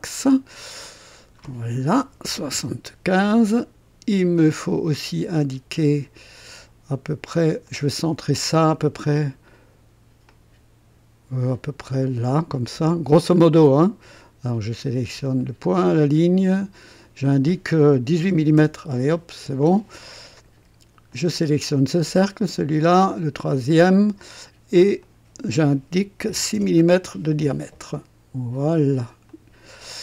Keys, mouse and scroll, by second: 0.8 click, 2.0 KP_7, 2.3 KP_5, 2.5 KP_Enter, 7.6 click, 9.1 click, 10.3-13.3 drag, 13.3 click, 15.3 click, 16.5 click, 18.0 KP_1, 18.3 KP_8, 18.6 KP_Enter, 21.1 click, 22.1 click, 23.6 click, 25.0 click, 26.2 KP_6, 26.5 Return, 26.5 KP_Enter, 29.2 click.